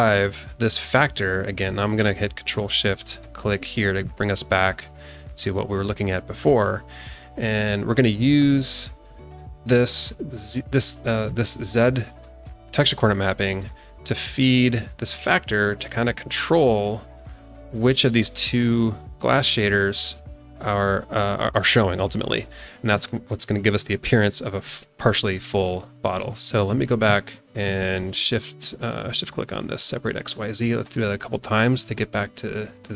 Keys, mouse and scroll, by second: 3.2 ctrl+shift+click, 8.4 alt+shift+middle click, 11.2-12.4 alt+shift+middle drag, 13.7-18.0 drag, 22.5 scroll down 2, 23.0 shift+middle click, 26.1 scroll down 1, 26.3 shift+middle click, 29.4 ctrl+shift+click, 30.2 ctrl+shift+click, 30.9 ctrl+shift+click, 32.5-32.9 scroll up 1.